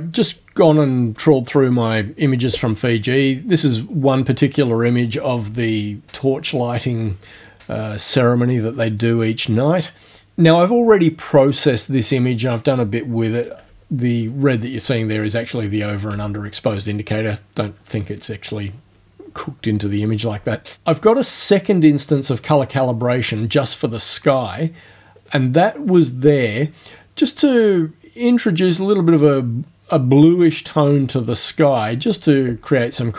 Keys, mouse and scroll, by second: 13.6 o, 14.8 o, 16.1 o, 20.4 o, 25.2 click.